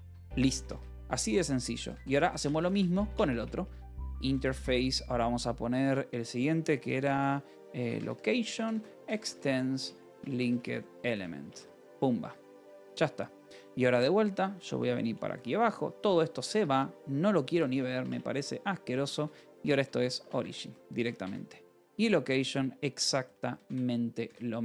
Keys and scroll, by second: 0.4 space, 0.9 Return, 1.5-4.9 typing, 6.9-12.0 typing, 12.1 Escape, 12.9 ctrl+s, 14.3-16.7 typing, 16.4 Escape, 17.9-24.6 typing, 20.3 Escape.